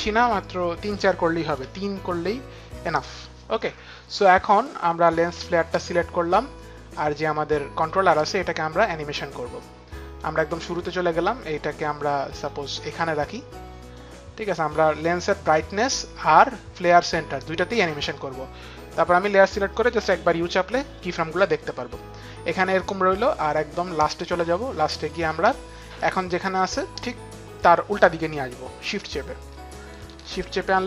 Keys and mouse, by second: 1.5 Return, 1.5 KP_3, 4.9 click, 9.3 click, 12.0 click, 15.1 click, 16.4 click, 18.9 click, 19.6 u, 23.2 click, 24.8 click, 27.2 click, 28.7 Return.